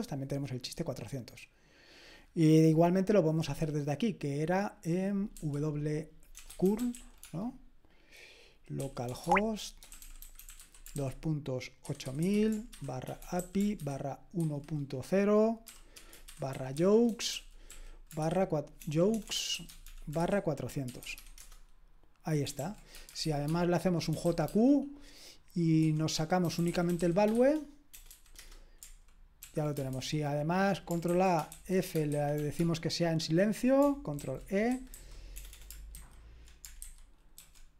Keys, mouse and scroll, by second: 5.3 w, 6.4-7.4 typing, 8.8-14.4 typing, 15.9-24.4 typing, 21.3 Return, 22.6 ctrl+p, 26.2-28.1 typing, 28.4 Return, 29.4 ctrl+p, 29.9 alt+b, 31.0 ctrl+a, 31.5 alt+f, 31.7-32.8 typing, 34.2 ctrl+e, 34.7-35.3 typing, 35.9 alt+b, 36.8 alt+b, 37.4 alt+f.